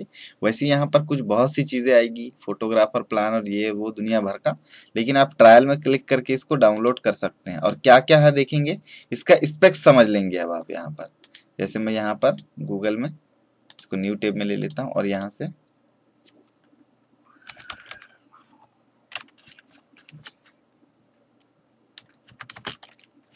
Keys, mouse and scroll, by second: 6.7 click, 11.1 right click, 13.6 click, 17.4 p, 19.7 Down, 20.1 space, 21.9-22.5 typing.